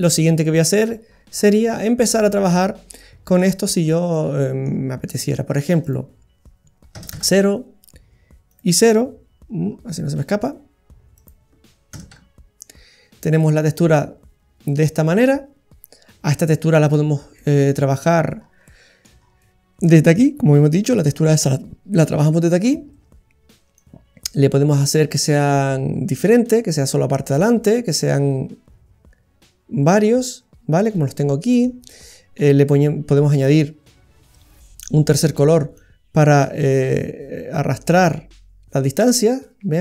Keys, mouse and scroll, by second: 0.0-1.1 scroll up 3, 1.1 middle click, 1.1-1.6 scroll up 5, 1.8 middle click, 2.4-3.2 scroll up 5, 3.0 middle click, 3.7 scroll up 1, 4.1 middle click, 5.9 click, 8.4 click, 9.6-10.1 scroll down 9, 10.2 middle click, 11.5 click, 13.4 middle click, 16.9-17.4 scroll down 7, 17.4 middle click, 17.9-19.2 scroll up 8, 18.6 middle click, 19.2-19.8 scroll up 2, 19.8 middle click, 23.7 click, 30.8 middle click, 33.3 click, 35.8 click.